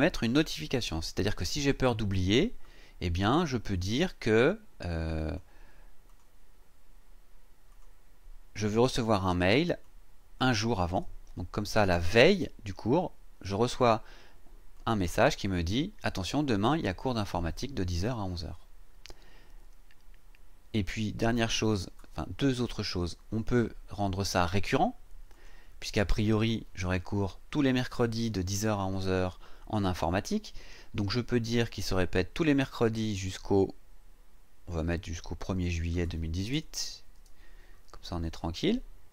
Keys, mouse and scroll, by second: 5.2 click, 6.1 click, 7.7 click, 8.5 click, 9.8 click, 10.9 KP_1, 12.3 click, 14.7 click, 15.4 click, 25.3 click, 33.2 click, 35.4 click, 36.5 KP_0, 37.1 KP_1, 38.4 click.